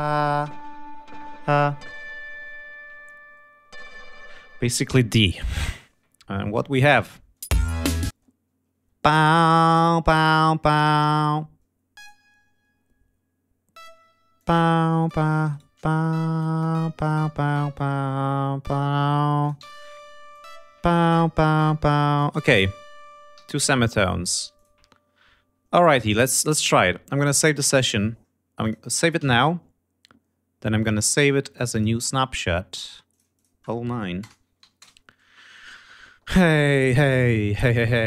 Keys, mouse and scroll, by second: 6.2 ctrl+scroll down 2, 6.5 ctrl+scroll up 2, 7.1 scroll down 2, 7.4 space, 8.1 ctrl+space, 8.5 ctrl+scroll up 2, 10.2 d, 11.9 click, 13.7 click, 14.4 click, 15.0 click, 15.5 shift+right click, 16.1-19.7 shift+drag, 19.6 ctrl+y, 20.3 click, 20.9-22.4 drag, 22.3 ctrl+y, 22.7 ctrl+scroll down 2, 23.3 ctrl+g, 23.6 ctrl+scroll down 2, 24.2 ctrl+click, 24.5 ctrl+click, 25.8 ctrl+scroll up 2, 27.1 click, 28.6 click, 29.2 ctrl+s, 30.8 click, 31.7 click, 33.1 click, 34.2 BackSpace, 34.6 9, 34.8 Return.